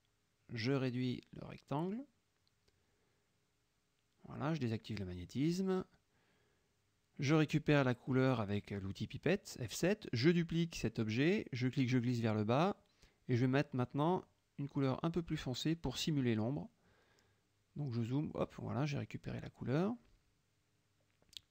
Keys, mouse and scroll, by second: 1.8-4.5 drag, 5.6 click, 6.1 middle click, 8.2 F7, 9.2 click, 10.0 middle click, 10.4 F1, 11.5 ctrl+d, 12.4-13.8 drag, 15.5 F7, 16.8 click, 17.7 click, 18.5 KP_Subtract, 20.2 KP_Subtract, 20.6 F1, 20.9 click.